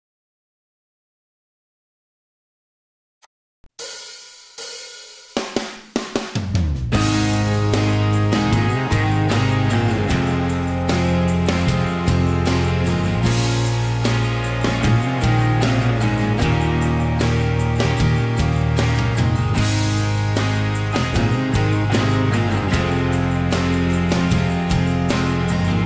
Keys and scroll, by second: 7.8 4, 7.9 Return, 10.4 typing, 13.7 Escape, 16.6-17.8 typing, 18.1 Escape, 19.3 b, 22.9 Escape, 23.1 Escape.